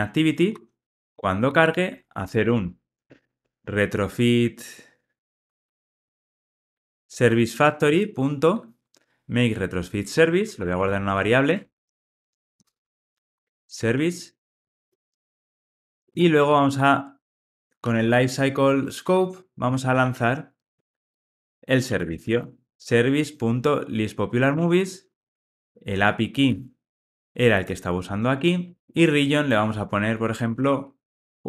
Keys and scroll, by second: 7.6 Return, 19.4 Return, 26.0 super+v, 26.3 super+z, 28.8 super+v.